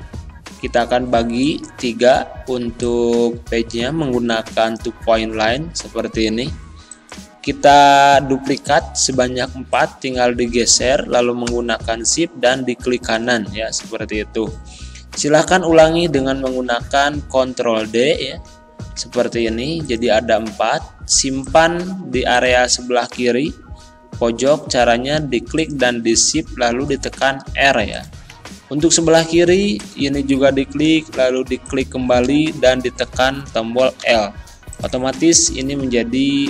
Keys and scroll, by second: 17.8 ctrl+d, 27.2 r, 34.0 l.